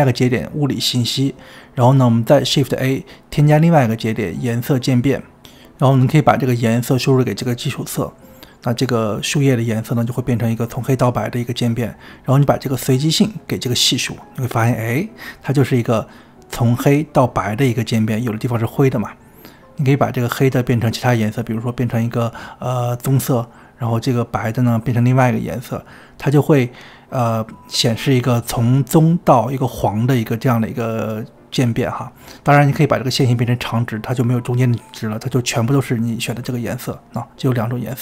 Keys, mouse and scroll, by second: 1.9-4.9 drag, 8.0-23.2 drag, 25.3-27.8 drag, 32.4-38.0 drag.